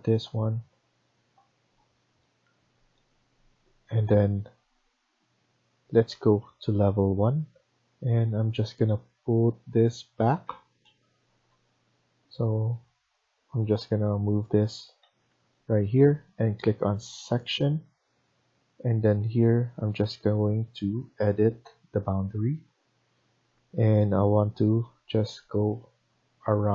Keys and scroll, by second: 10.3 Escape, 11.3 ctrl+z, 14.9 Escape, 15.3 Escape.